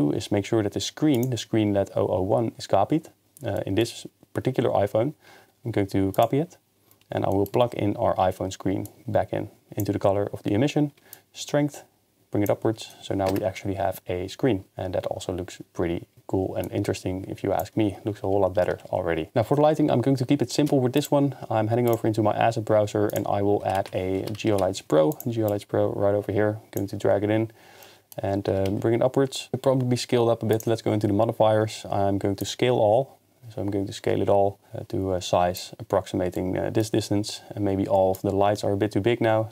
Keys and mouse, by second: 3.6-4.2 middle drag, 6.3 drag, 7.3 middle click, 8.9 drag, 11.1-12.5 shift+drag, 13.8 KP_0, 16.7 shift+click, 18.8 ctrl+s, 21.0 click, 23.1-25.2 drag, 27.8 middle click, 29.4 g, 29.4 z, 30.6 click, 32.4-35.6 shift+drag, 38.1-39.5 shift+drag.